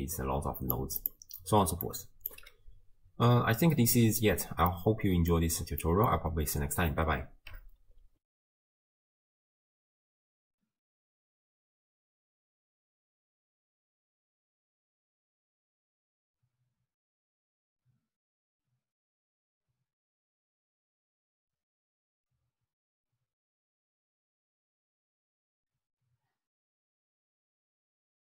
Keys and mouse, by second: 1.0 click, 2.0 click, 4.3 x, 4.8 middle click, 5.9 click, 8.3 ctrl+alt+shift+w.